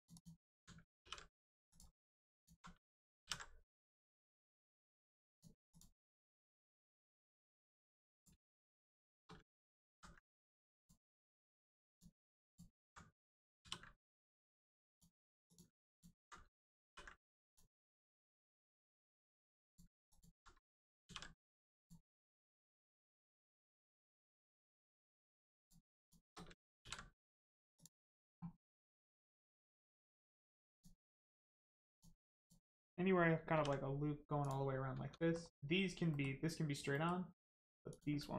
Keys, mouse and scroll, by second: 0.1 alt+click, 1.0 ctrl+e, 1.6 click, 2.3 alt+click, 3.2 ctrl+e, 5.2 click, 6.0 scroll down 1, 6.2 middle click, 8.1 click, 8.9 shift+click, 9.3 ctrl+click, 10.8 click, 12.4 alt+click, 13.6 ctrl+e, 14.8 click, 15.8 alt+click, 16.4 ctrl+click, 16.8 ctrl+e, 17.4 click, 17.7 scroll down 1, 18.0 middle click, 19.6 click, 20.0 alt+click, 20.6 ctrl+click, 21.7 click, 22.4 middle click, 25.6 click, 26.0 shift+click, 26.8 ctrl+e, 27.7 click, 28.6 middle click, 31.8 click, 33.5 ctrl+e, 34.4 click, 34.9 Tab, 35.1 middle click, 37.3 Tab, 37.8 click.